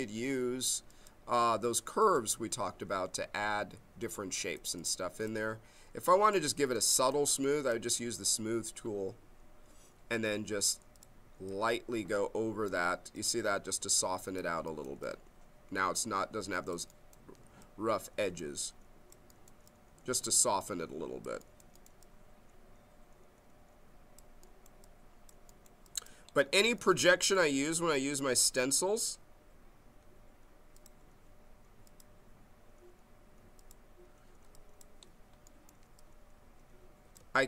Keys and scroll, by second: 37.3 ctrl+z.